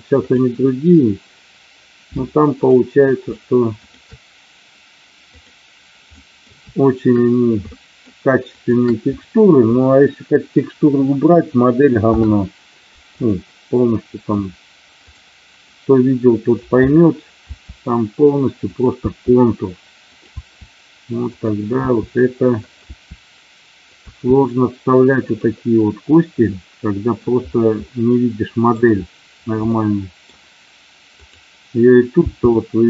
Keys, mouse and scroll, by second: 0.2 click, 2.6 click, 3.8 shift+click, 6.0 middle click, 7.6 shift+middle click, 8.5 shift+click, 12.0 ctrl+p, 14.0 middle click, 15.7 middle click, 17.5 e, 18.6 click, 19.0 e, 19.9 click, 20.3 e, 21.2 click, 21.9 e, 22.6 click, 22.8 e, 23.8 click, 24.0 e, 25.2 click, 26.5 middle click, 27.7 middle click, 29.7 middle click, 31.1 click, 32.1 g.